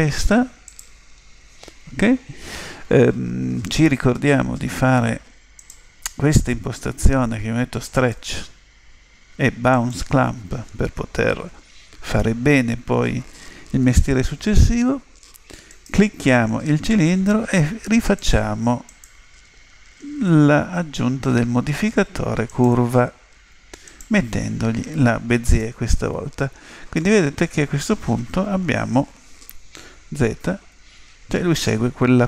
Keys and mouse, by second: 5.6 click, 8.0 click, 9.7 click, 15.7 right click, 18.0-20.7 drag, 23.9 click, 26.9-28.9 middle drag, 28.6 KP_7, 30.2 z.